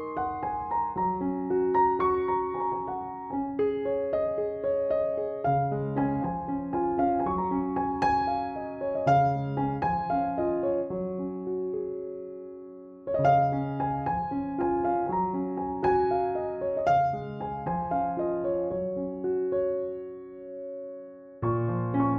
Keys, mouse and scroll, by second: 6.9 click, 8.2 ctrl+=, 9.0 click, 9.9 ctrl+d, 10.5 ctrl+e, 11.3 ctrl+=, 11.8-14.7 typing, 14.2-14.7 click, 14.9 click, 18.8 ctrl+j, 19.5 click, 20.1 alt+t, 20.8 click.